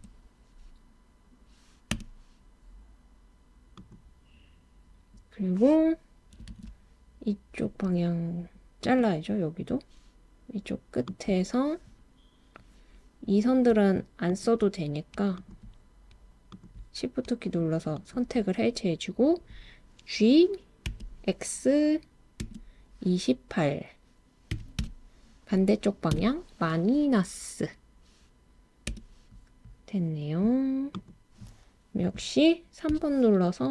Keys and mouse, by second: 0.0 Return, 1.9 Return, 3.8 click, 6.5 super+r, 11.1 click, 14.3 shift+click, 15.4 shift+click, 18.0 shift+click, 20.9 g, 22.4 x, 24.5 2, 24.8 8, 26.1 -, 28.9 Return, 32.9 3.